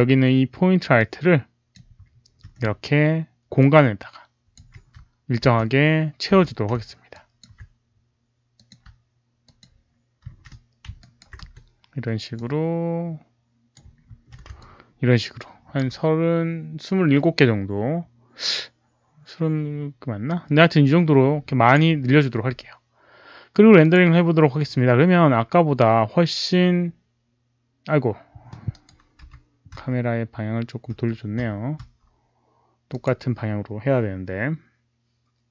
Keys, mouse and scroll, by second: 0.9 click, 1.6 alt+middle click, 1.6 shift+d, 3.5 click, 4.7-6.9 typing, 7.0 alt+click, 8.5 click, 9.4 shift+click, 10.2 shift+d, 11.0 alt+right click, 11.3 w, 12.3-13.7 drag, 14.1 shift+d, 14.6-15.7 alt+drag, 20.5-21.2 typing, 20.7 click, 20.7 alt+right click, 23.7 click, 28.7 right click, 28.8 click, 32.8 click.